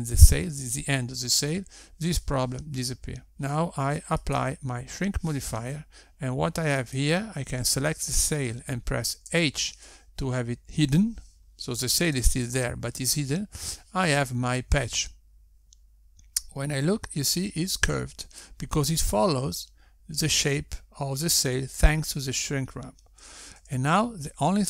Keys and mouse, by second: 6.4 click, 8.9 click, 11.3 h.